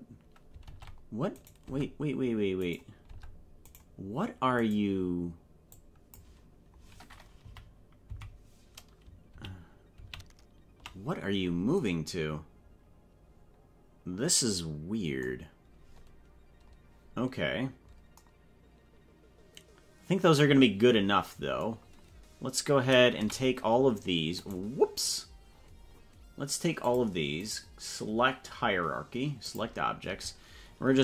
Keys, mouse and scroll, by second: 0.6 ctrl+Tab, 2.6 right click, 3.1 Tab, 3.7 right click, 4.6 right click, 5.7 click, 7.5 Right, 8.1 Left, 9.5 ctrl+z, 10.2 ctrl+z, 23.2 a, 24.4 right click, 25.5-26.1 scroll down 9, 26.8 click, 27.4-29.7 right drag.